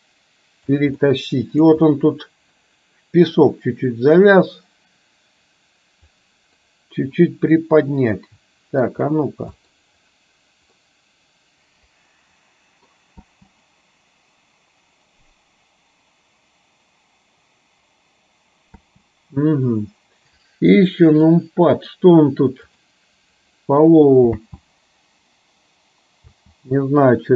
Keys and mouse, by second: 1.1 middle click, 3.9-6.4 drag, 6.8-8.9 middle drag, 9.7 middle click, 11.0-13.0 middle drag, 13.4 space, 19.0 space, 21.2 click, 22.8 click, 24.5 space, 26.5 space.